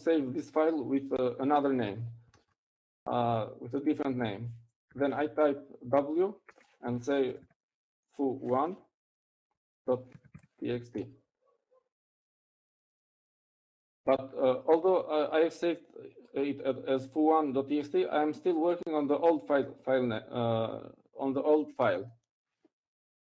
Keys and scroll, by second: 5.6 shift+;, 7.9-11.1 typing, 12.5-13.6 typing.